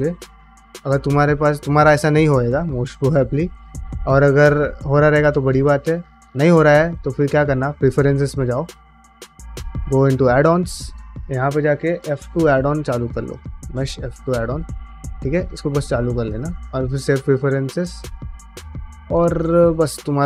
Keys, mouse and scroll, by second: 1.6 ctrl+alt+space, 6.4-8.9 drag, 19.2 click, 19.9 ctrl+alt+space.